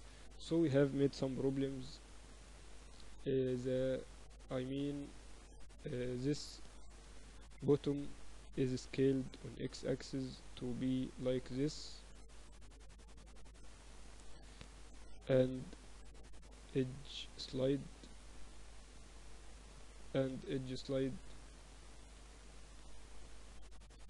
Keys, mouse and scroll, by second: 1.1 KP_1, 1.5 Tab, 2.7-7.5 typing, 8.7 s, 11.5-13.5 drag, 14.3 a, 15.0 b, 16.3 ctrl+e, 20.1 ctrl+e, 22.3 s.